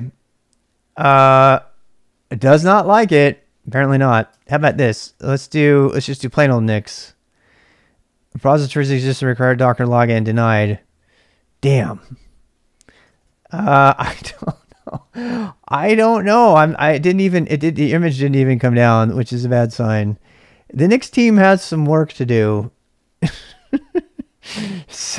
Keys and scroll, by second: 4.3 ctrl+[, 4.4 k, 4.7 shift+a, 5.3 BackSpace, 5.3 BackSpace, 5.9 Return, 13.0 ctrl+[, 13.2 k, 23.6-25.1 typing.